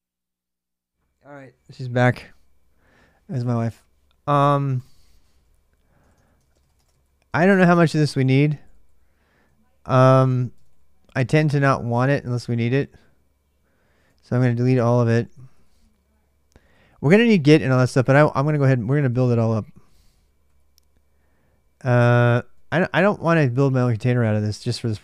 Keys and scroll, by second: 5.8 ctrl+[, 5.9 ctrl+j, 6.1-11.6 typing, 13.9-25.0 typing.